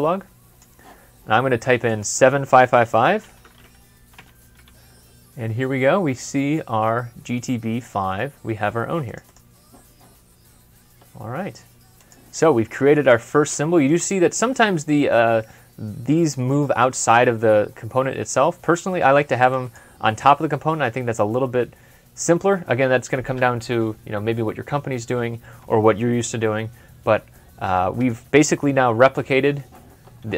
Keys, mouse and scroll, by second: 2.9-4.0 typing, 3.1 double click, 9.1 double click, 10.2 scroll down 1, 10.6 scroll up 1, 13.8 Escape, 17.9 Escape, 18.4 typing, 20.6 typing, 27.1 typing, 27.1 scroll down 1, 27.2 middle click, 28.5 middle click, 28.8 super+Left.